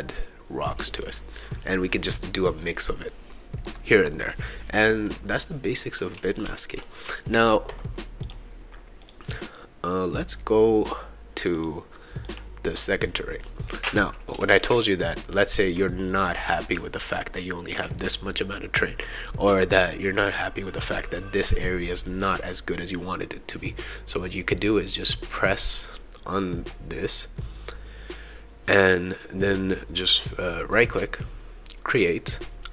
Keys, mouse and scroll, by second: 4.5-7.2 right drag, 6.1 s, 6.7 e, 8.2 click, 9.0 click, 11.5 click, 12.2 click, 13.6-20.4 right drag, 14.3 e, 15.5-18.1 typing, 24.3 click, 30.7 right click.